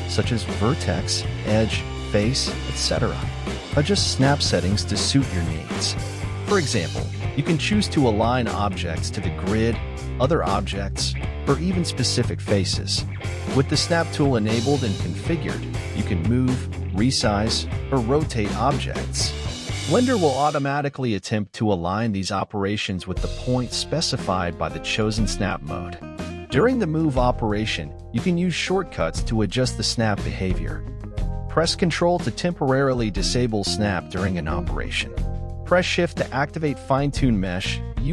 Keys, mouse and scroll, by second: 2.2 click, 2.6 click, 2.8-4.8 drag, 5.1 scroll down 2, 5.4 shift+middle click, 5.7 shift+scroll up 1, 5.8 z, 6.6 shift+middle click, 6.8-7.4 scroll up 1, 7.4 right click, 7.8 Tab, 8.4 middle click, 9.1 right click, 9.3-10.3 scroll up 2, 10.3 g, 13.5-15.0 drag, 15.0-15.9 scroll up 1, 15.9 g, 17.4-17.8 scroll up 4, 17.8 g, 19.6-21.5 drag, 21.5 g, 23.2 middle click, 24.0 g, 25.2-26.5 middle drag, 26.5 ctrl+z, 26.7-27.1 scroll down 1, 27.1 ctrl+z, 27.3 middle click, 27.7-28.5 scroll down 8, 28.5 KP_1, 28.8 middle click, 29.2 KP_1, 30.0-31.9 drag, 32.0-33.0 middle drag, 33.0 KP_1, 33.5 shift+middle click, 34.0-34.3 scroll up 2, 34.3-35.3 shift+middle drag, 35.3 right click, 36.0 g.